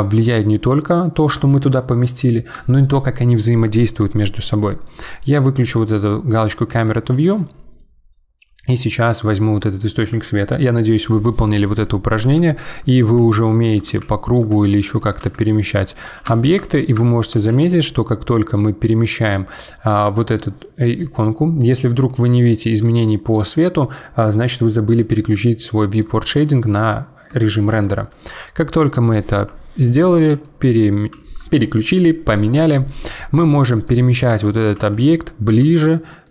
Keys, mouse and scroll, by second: 0.0-3.0 shift+middle drag, 5.6 click, 6.7 n, 7.8-8.2 middle drag, 8.2-9.5 scroll down 4, 9.5 click, 12.2 g, 13.1 g, 14.5 g, 15.2 g, 16.3-17.5 shift+middle drag, 17.5 g, 22.7 click, 25.0 click, 25.9 click, 27.7 click, 28.6-30.1 middle drag, 30.1 g, 34.1-34.7 middle drag, 34.7 g, 35.8-36.3 middle drag.